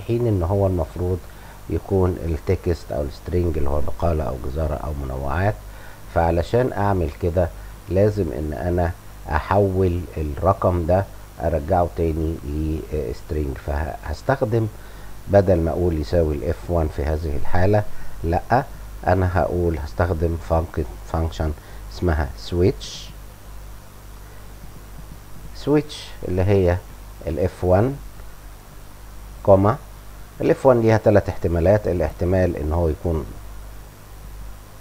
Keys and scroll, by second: 18.5 BackSpace, 22.3-24.2 typing, 28.2 Return, 28.6 ,.